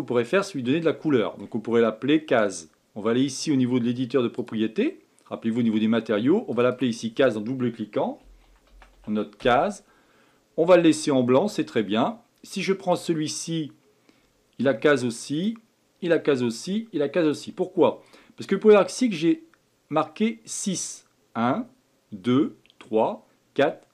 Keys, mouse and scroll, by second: 1.0-4.1 shift+middle drag, 4.3 click, 6.5 click, 6.7-9.9 drag, 12.9 click, 15.3 click, 17.3 click, 18.0 click.